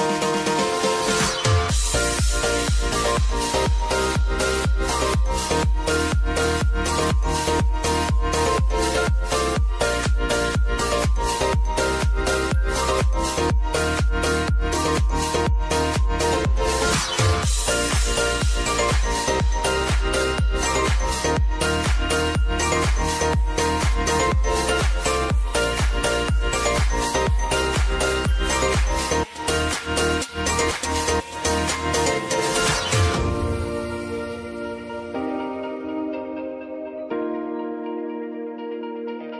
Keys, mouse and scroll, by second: 0.2 click, 0.6-1.3 scroll down 1, 1.3-2.2 scroll up 1, 2.3 alt+click, 2.9 ctrl+v, 3.3 click, 3.8 space, 7.9-9.3 typing, 8.2 click, 9.9 click, 10.9 =, 13.5 click, 15.2 [, 16.2 click, 17.2 [, 18.0-21.5 drag, 21.8 [, 22.9-24.4 drag, 24.7 [, 25.5 click, 26.8 [, 27.7 click, 28.8 [, 29.2-30.5 drag, 31.9 [, 32.6 click, 34.6 [, 35.1 space.